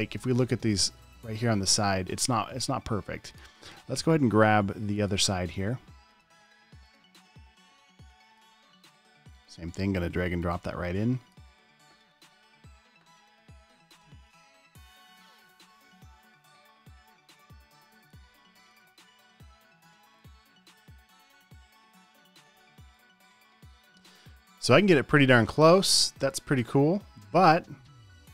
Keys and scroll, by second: 16.0 super+z, 17.4 super+z.